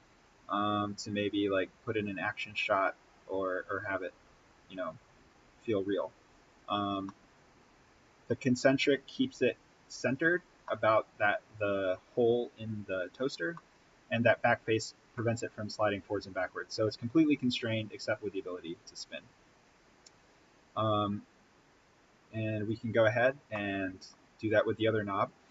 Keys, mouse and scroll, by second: 6.8 scroll down 1, 7.0 middle click, 7.2 scroll up 1, 8.2-10.2 scroll down 1, 10.9-13.2 middle drag, 13.2 scroll up 1, 13.5-16.7 middle drag, 17.2-23.1 drag, 23.4 middle click, 24.3-25.2 scroll up 1, 25.2-25.5 drag.